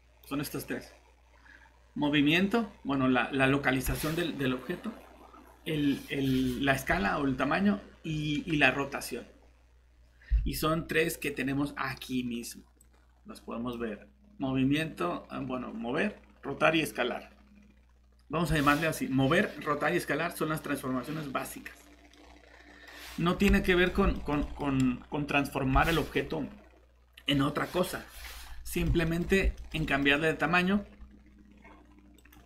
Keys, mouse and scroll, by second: 10.4 alt+Tab, 22.1 middle click, 23.0 scroll up 1, 23.6 middle click, 30.1 scroll up 1, 32.2 click.